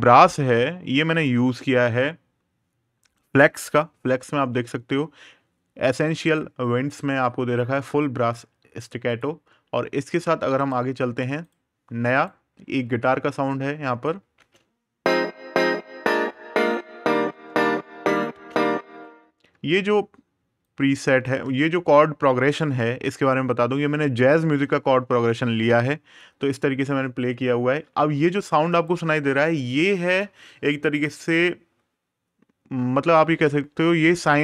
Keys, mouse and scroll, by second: 3.6 super+KP_Add, 7.6 super+KP_Subtract, 8.8 click, 10.3 right click, 11.2 click, 11.9 right click, 14.1 space, 18.1 space, 18.4 click, 28.5 click.